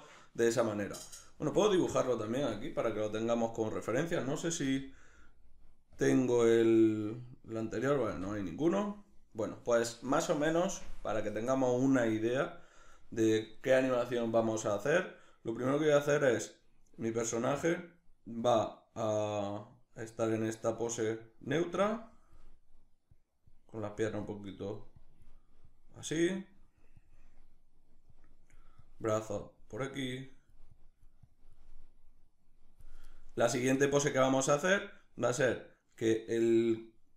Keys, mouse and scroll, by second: 0.8-2.1 shift+middle drag, 2.1-7.7 drag, 4.3 n, 7.7 n, 20.9-37.1 drag.